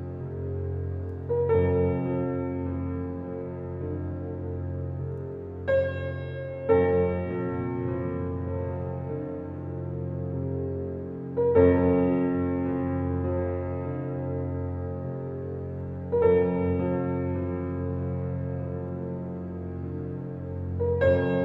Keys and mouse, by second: 1.2 click, 3.6-5.8 alt+drag, 6.5-8.2 alt+drag, 8.3 alt+shift+click, 8.7 click, 9.5 ctrl+s, 10.0-12.1 ctrl+alt+drag, 12.1 Tab, 14.0-15.4 drag, 15.5 alt+click, 15.7-17.1 alt+drag, 17.3 3, 18.2 g, 20.3 click, 20.9 Tab.